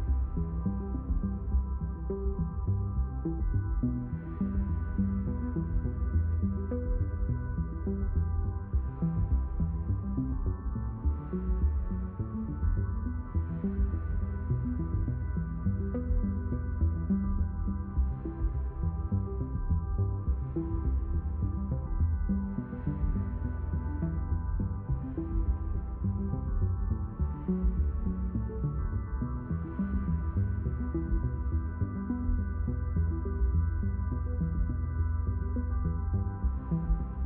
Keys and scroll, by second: 0.0-1.7 typing, 7.6 ctrl+alt+d, 11.3 ctrl+alt+d, 36.4 d.